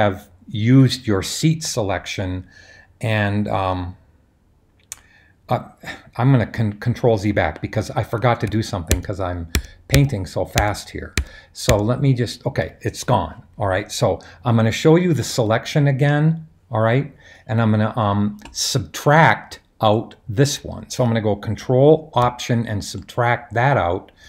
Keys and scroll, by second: 8.9 super+z, 9.5 super+z, 9.9 super+z, 10.6-11.2 super+z, 11.7 super+z, 15.2 super+h.